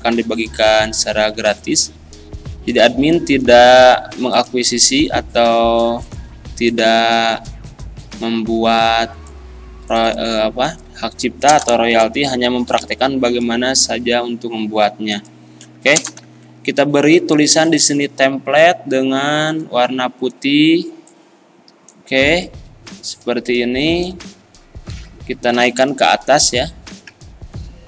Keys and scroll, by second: 0.9 e, 11.5 BackSpace, 12.7 l, 12.8 a, 16.0 BackSpace, 16.2 e.